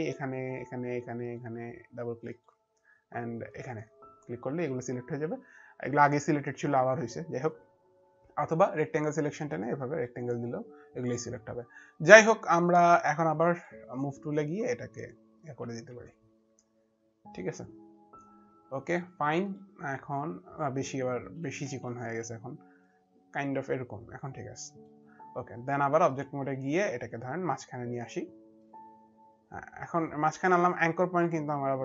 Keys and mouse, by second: 0.2 click, 4.2 click, 6.3 click, 6.7 click, 9.3 click, 14.4 click, 14.7 click, 19.2 click, 20.7 ctrl+z, 21.9 ctrl+z, 21.9 click, 22.7 ctrl+z, 23.5 ctrl+z, 23.5 click, 25.9 click, 29.8 click.